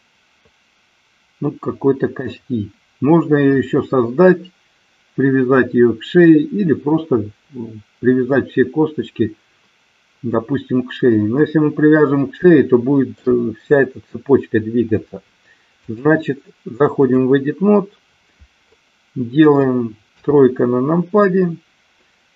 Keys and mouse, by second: 12.3 shift+middle click, 15.7-17.2 drag, 20.1 KP_3.